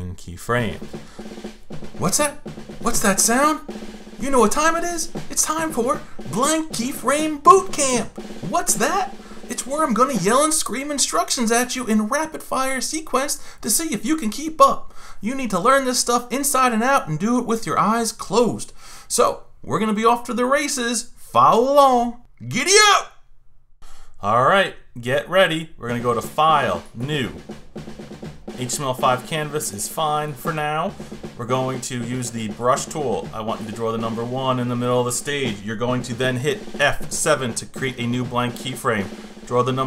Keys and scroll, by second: 36.8 F7.